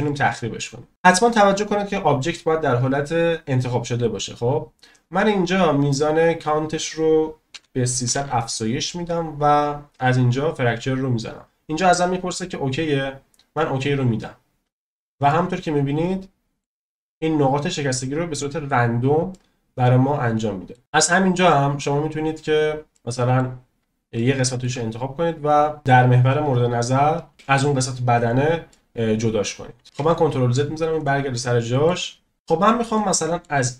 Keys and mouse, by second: 0.0-0.6 middle drag, 2.0 click, 6.5-9.4 drag, 8.1 0, 10.6-14.3 drag, 15.3-16.6 middle drag, 17.1-17.7 middle drag, 18.3 middle drag, 19.3-20.7 middle drag, 20.8 middle click, 21.5 click, 21.6 middle click, 22.9-23.3 middle drag, 24.1-24.6 shift+middle drag, 25.8 click, 28.7-29.5 middle drag, 30.0 ctrl+z, 31.3-31.6 drag, 31.6 middle click, 32.9-33.4 middle drag.